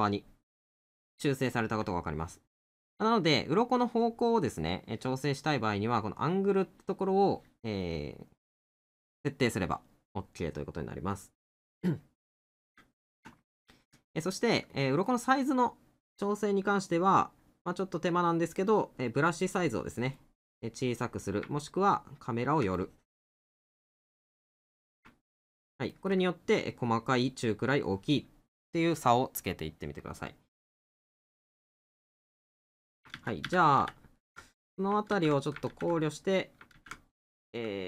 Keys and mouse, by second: 3.1 middle click, 7.9 middle click, 10.3 middle click, 13.4 middle click, 15.5 right click, 20.7 middle click, 25.3 middle click, 30.1 middle click, 34.5 middle click, 37.4 middle click.